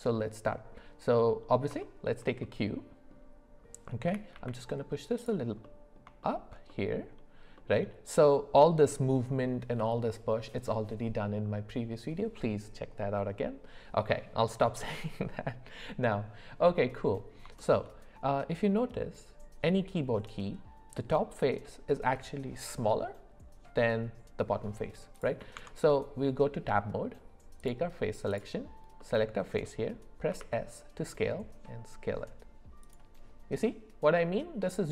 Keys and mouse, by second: 0.1 middle click, 1.8 shift+middle click, 2.4 middle click, 4.1 g, 5.6 middle click, 6.2 shift+middle click, 6.7 middle click, 7.6 middle click, 16.9 middle click, 17.6 shift+middle drag, 25.5 Tab, 29.0 middle click, 30.3 s.